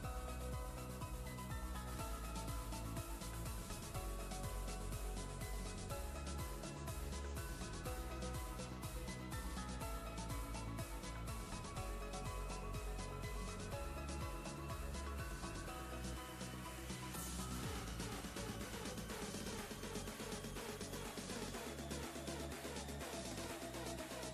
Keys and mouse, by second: 3.6 click, 5.9 ctrl+space, 6.1-6.9 ctrl+drag, 8.8 ctrl+space, 9.0 ctrl+click, 9.3-9.6 ctrl+space, 9.6 click, 10.0-10.3 space, 10.3-10.9 ctrl+click, 10.9-12.3 space, 13.7-14.3 click, 14.0 space, 14.9-15.6 ctrl+click, 15.4 ctrl+space, 15.6-16.2 click, 15.9 space, 16.5 ctrl+click, 17.6-18.3 space, 18.0 click, 18.3 ctrl+space, 19.3 click, 19.6-20.4 space, 20.4 click, 20.6-21.0 space, 21.5 click, 21.8-22.1 space, 23.0 click.